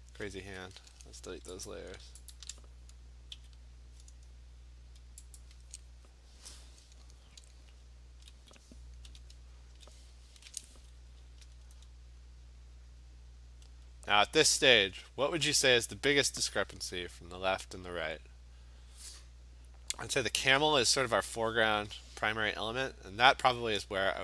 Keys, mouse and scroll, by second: 1.8 click, 2.4 shift+click, 3.4 Delete, 5.4 click, 9.1 b, 11.3 scroll down 3, 11.5-14.5 scroll, 16.2 scroll, 17.3 scroll.